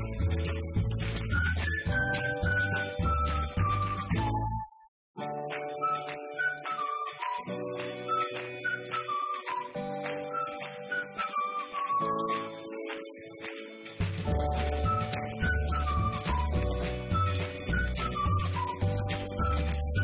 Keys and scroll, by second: 12.6-13.6 typing, 14.6-20.0 typing.